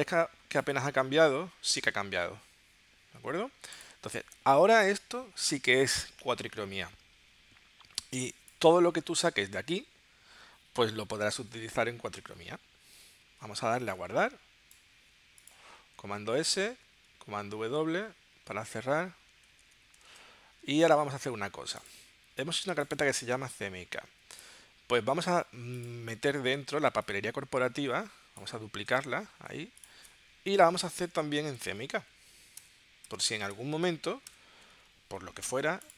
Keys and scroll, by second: 8.2 space, 13.7 super+s, 16.0 super+s, 19.5 super+w, 20.2 super+Tab, 30.5 Return, 30.8 Right, 31.6-34.3 typing.